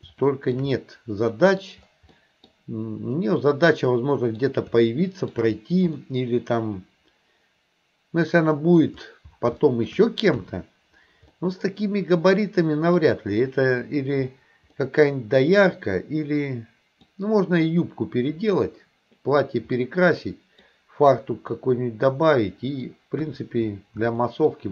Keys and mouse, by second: 0.3 shift+middle click, 0.8 middle click, 2.2 middle click, 3.8 middle click, 4.9 shift+middle click, 6.0-8.9 middle drag, 9.6 shift+middle click, 10.4 KP_1, 11.3-13.0 middle drag, 14.8-17.1 middle drag, 19.8 middle click, 21.6-22.9 middle drag, 23.2 KP_1, 24.2 shift+middle click.